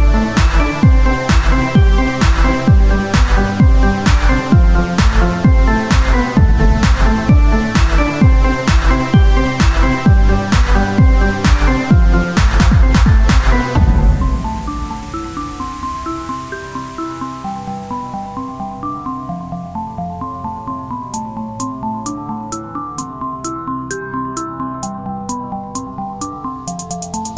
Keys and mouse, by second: 0.8-2.0 drag, 1.4 z, 2.0 z, 2.7 s, 8.2 z, 8.5 c, 10.8 z, 14.3 z, 14.9 c, 22.5 c, 24.2-25.5 drag.